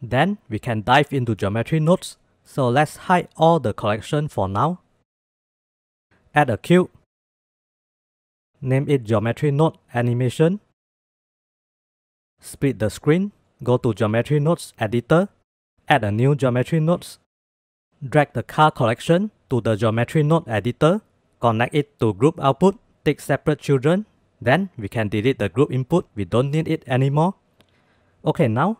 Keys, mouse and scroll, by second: 2.8-3.8 drag, 4.1-4.8 middle drag, 4.9 shift+s, 6.4 shift+a, 8.4-12.5 drag, 12.5 ctrl+s, 13.3 click, 14.3-15.5 drag, 16.4 click, 16.9 ctrl+s, 17.4 click, 18.9-19.9 drag, 21.3-22.1 drag, 23.4-23.8 drag, 24.7-25.1 shift+drag, 25.9 click, 26.1 x, 27.1 ctrl+s.